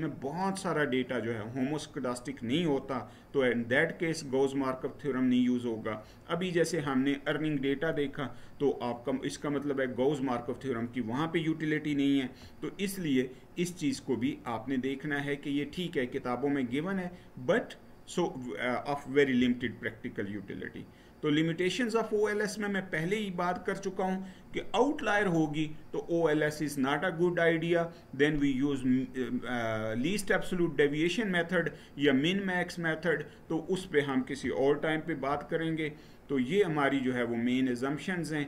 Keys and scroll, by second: 19.2 Right, 35.1 Right.